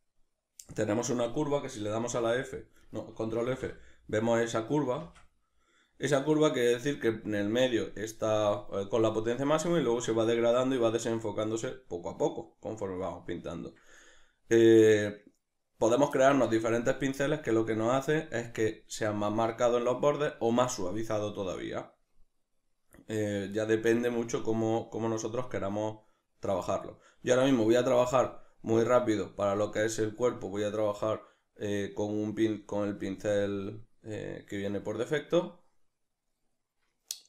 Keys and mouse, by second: 2.0 middle click, 2.0 f, 2.9 right click, 3.4 shift+f.